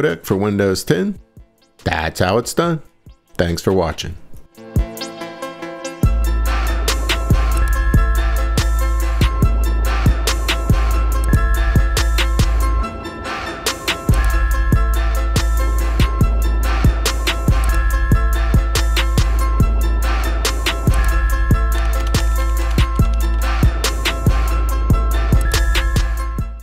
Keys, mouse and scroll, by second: 0.7 click, 3.0 click, 4.2 click, 4.9 click.